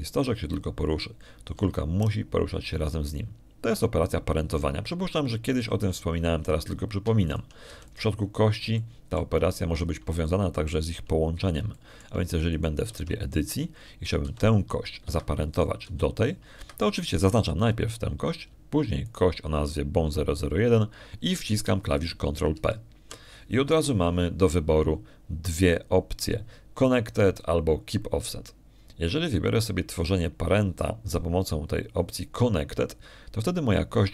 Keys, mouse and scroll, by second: 1.0 click, 1.6 right click, 3.4 g, 7.7 click, 9.1 shift+right click, 9.6 shift+x, 9.8 shift+click, 10.6 shift+click, 11.4 shift+middle click, 12.1 shift+click, 13.1 shift+middle click, 13.6 shift+click, 14.4 shift+right click, 14.8 shift+Tab, 16.1 g, 16.9 Escape, 17.4 click, 17.7 g, 18.4 Escape, 19.1 right click, 20.9 shift+right click, 24.4 ctrl+p.